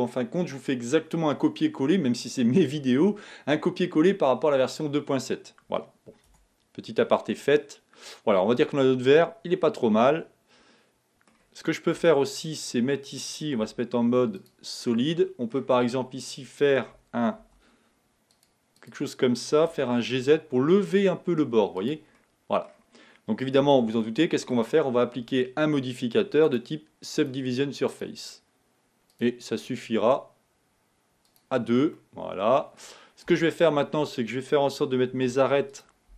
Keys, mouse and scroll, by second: 6.7 Tab, 7.3-10.4 middle drag, 12.1 Tab, 12.5-13.7 scroll up 4, 13.7 z, 15.2-17.5 middle drag, 17.5 ctrl+r, 19.8 g, 22.2 middle click, 22.9-23.2 scroll down 3, 23.6 Tab, 24.1 middle click, 24.7 scroll up 1, 26.5 click, 27.2 click, 27.9-30.9 drag, 31.3 click, 32.0-33.3 middle drag, 33.3 Tab, 35.2 ctrl+r.